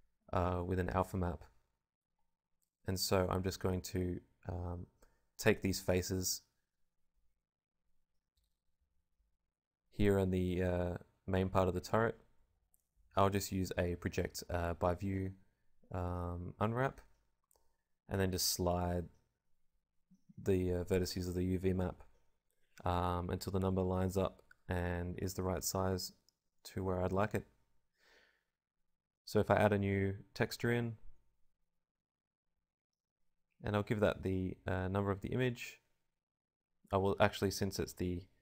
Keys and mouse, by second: 0.0-5.7 typing, 8.2 u, 10.9 s, 11.7 g, 12.2 s, 13.0 g, 13.5 click, 14.8-19.6 typing, 18.9 click, 19.9 ctrl+z, 20.0 ctrl+z, 20.2 ctrl+z, 20.2-21.7 drag, 21.1 l, 21.8 g, 22.5 KP_0, 24.5 Tab, 25.0 KP_Decimal, 25.2 KP_0, 27.1-28.6 right drag, 28.6-29.9 drag, 29.9 right click.